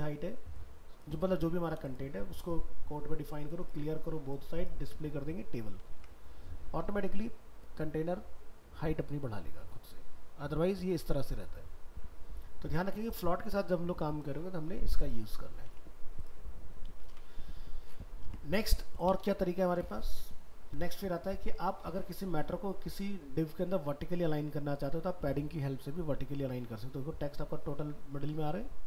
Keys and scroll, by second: 5.9 alt+Tab, 15.6 alt+Tab, 17.1 ctrl+w, 18.2 alt+Tab, 19.3 ctrl+w.